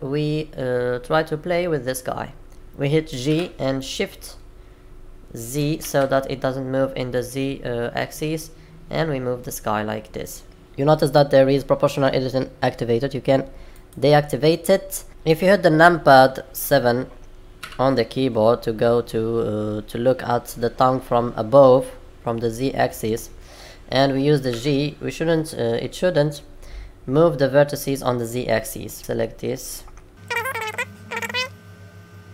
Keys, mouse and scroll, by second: 1.4-1.9 scroll down 3, 1.8-2.3 scroll up 4, 3.2 g, 10.6 click, 13.7 click, 15.1 middle click, 17.5 KP_7, 23.4 scroll up 1, 24.5 g, 29.0 click, 30.3 g, 31.0 click, 31.3 g, 32.2 scroll down 1.